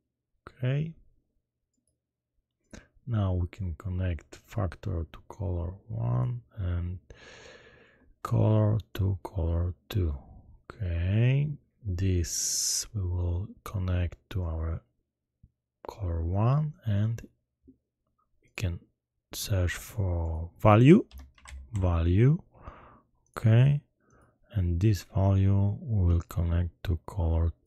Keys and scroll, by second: 19.6 shift+a, 21.0 v, 21.3 a, 21.4 l, 21.7 u.